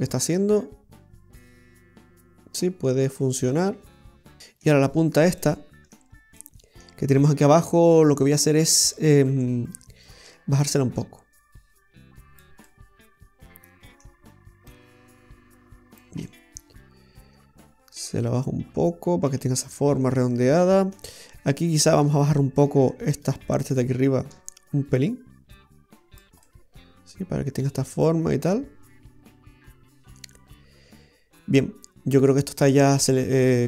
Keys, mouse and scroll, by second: 5.0-5.3 scroll up 1, 5.5 middle click, 6.4 middle click, 7.4 scroll up 1, 7.8 middle click, 8.7 right click, 9.1 shift+right click, 9.7 shift+right click, 10.7 click, 12.7 middle click, 14.7 click, 16.3 middle click, 21.9 right click, 22.6 shift+right click, 23.2 shift+right click, 25.0 click, 26.5 middle click.